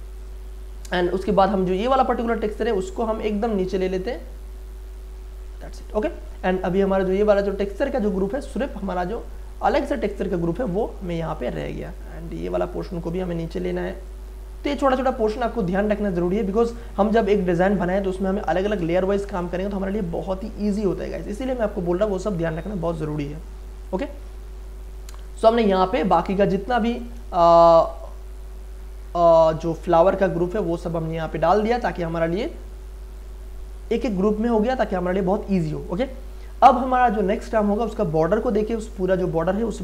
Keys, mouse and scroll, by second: 2.5-2.8 scroll down 1, 4.1-5.9 drag, 5.9-7.7 scroll up 1, 7.7 click, 13.3 scroll down 1, 14.0 click, 15.1-16.1 scroll up 1, 16.1 click, 23.3 click, 24.4-25.2 scroll up 1, 25.2 click, 25.5 scroll up 1, 26.9 shift+click, 27.0 shift+click, 27.9 click, 28.8-29.5 scroll down 1, 30.5 click, 30.6 click, 31.6-33.1 scroll up 1, 33.1 click, 39.2 click.